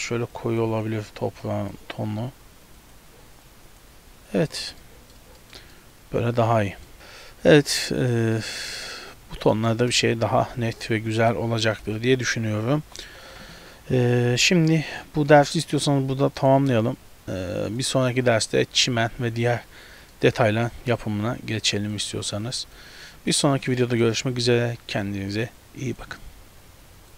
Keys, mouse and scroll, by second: 0.5 click, 1.5 click, 2.9 click, 3.6 click, 4.4 z, 4.8 middle click, 5.4 shift+middle click, 5.8 middle click, 7.5 scroll down 2, 7.8 z, 8.4 middle click, 9.1-9.9 scroll up 2, 9.6 middle click, 10.4 KP_0, 11.9 ctrl+alt+n, 12.8 ctrl+alt+b, 15.3 shift+middle click, 18.5 middle click, 20.2 middle click, 22.0 click, 22.5 click, 23.4 shift+middle click, 23.8 middle click.